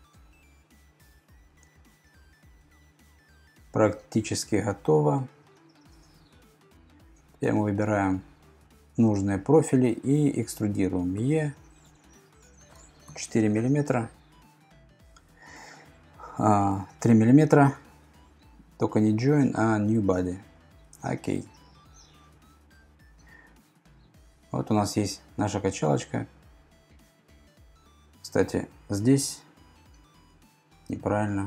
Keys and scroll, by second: 11.2 e, 13.1 4, 16.7 BackSpace, 16.8 BackSpace.